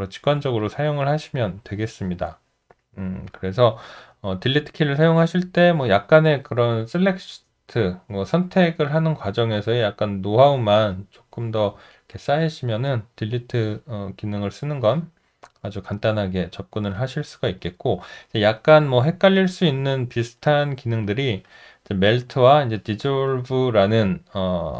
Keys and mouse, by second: 0.6 alt+click, 17.6 alt+right click, 18.0 alt+middle click, 18.6 alt+right click, 19.0 alt+middle click, 19.7 alt+middle click, 20.4 alt+right click, 21.0 alt+middle click.